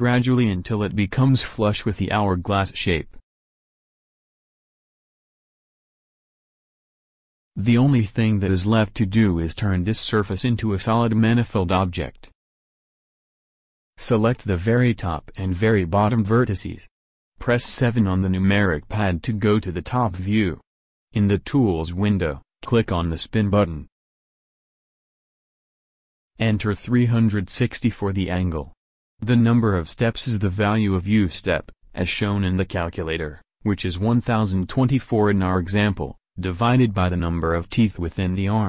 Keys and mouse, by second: 10.8 a, 14.6-20.8 middle drag, 20.8 KP_7, 25.8-29.4 drag.